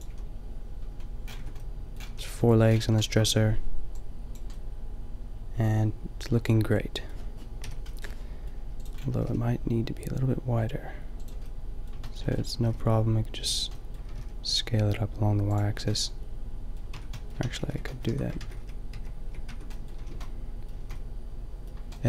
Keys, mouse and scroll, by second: 0.0 a, 0.9 middle click, 1.4 Tab, 2.1 a, 7.6 KP_5, 9.2-10.8 drag, 9.2 s, 11.0 middle click, 12.6 s, 14.0-15.5 middle drag, 14.0 s, 15.8 a, 16.9 Tab, 17.4 ctrl+z, 17.5 ctrl+z, 18.1 Tab, 18.4 ctrl+z, 19.4 Tab, 19.4 ctrl+z, 20.0 a, 20.1 a, 20.8 a.